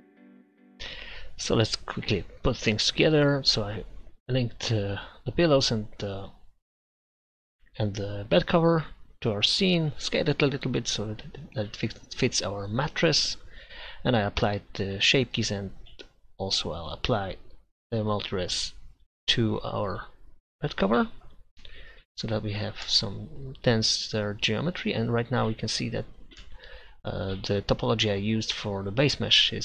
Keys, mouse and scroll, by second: 1.2 middle click, 21.0 click, 21.9 Tab, 26.7-28.2 middle drag, 29.4 middle click.